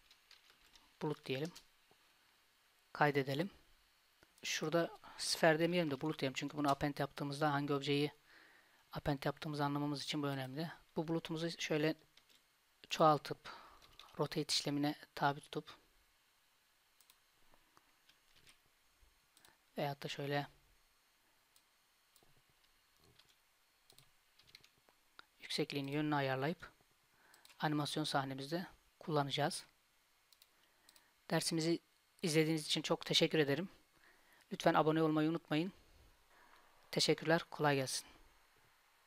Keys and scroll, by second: 12.3 shift+d, 13.9 r, 18.4 shift+d, 23.3 g, 24.5 r, 26.5 g.